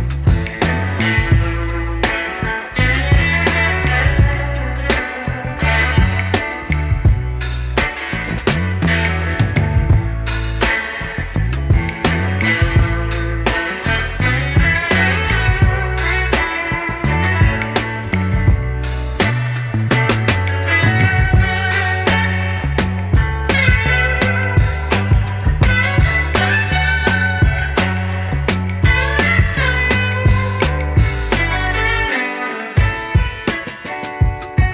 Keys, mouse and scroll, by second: 9.0 middle click, 11.9 e, 19.8-20.8 middle drag, 20.8 scroll down 1, 20.9 middle click, 21.3 scroll up 2, 21.4 middle click, 22.9 e, 23.4 middle click, 23.7 scroll down 2, 23.8 middle click, 24.1 scroll up 1, 24.2 middle click, 25.4 middle click, 25.6-26.0 scroll up 3, 26.0 ctrl+z, 26.3 i, 26.9 e, 27.5 scroll down 3, 27.6 middle click, 27.8-28.3 scroll up 3, 29.7 ctrl+z, 31.1 scroll down 1, 31.4 scroll up 1, 31.4 e, 32.6 scroll down 3, 32.7 middle click, 33.2-33.5 scroll up 4, 33.5-33.9 scroll down 2, 33.6 middle click, 33.9 middle click, 34.3 scroll up 1, 34.4-34.7 scroll down 1.